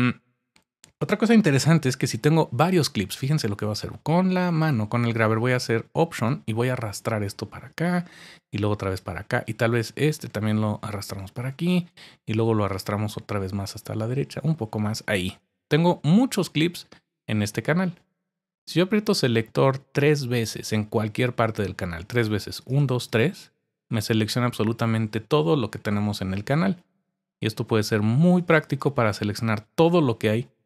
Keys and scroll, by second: 1.5-2.2 typing.